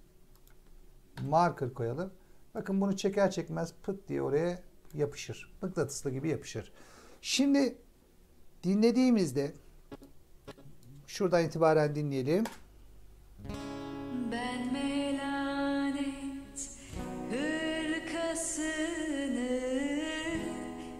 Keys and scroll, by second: 1.1 m, 12.3 space.